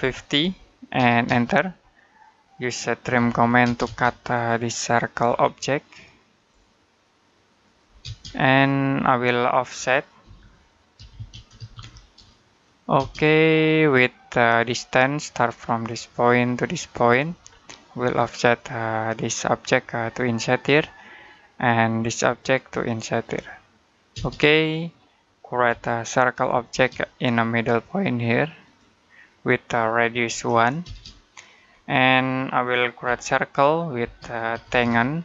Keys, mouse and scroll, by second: 0.0-1.1 typing, 1.7 middle click, 3.0-3.5 typing, 4.1 click, 5.1-5.6 scroll up 1, 6.2 click, 7.8 space, 8.1-8.5 scroll down 1, 8.5 middle click, 9.3 middle click, 10.0-11.6 typing, 12.8 space, 14.4-15.9 scroll up 1, 15.9 click, 19.3 click, 24.0 space, 25.0 middle click, 25.5 c, 26.5 space, 28.4 click, 30.1 1, 30.7 space, 31.7 middle click, 32.9-35.2 typing.